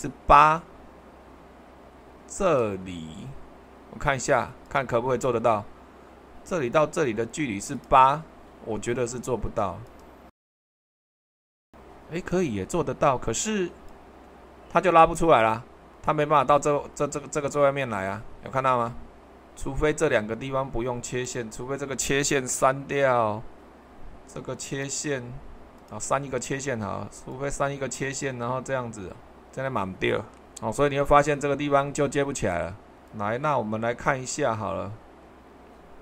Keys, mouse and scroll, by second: 0.0 super+2, 4.7-5.7 drag, 7.7-8.8 drag, 9.9 click, 10.9 8, 19.3 super+2, 22.9 Delete, 35.3 t.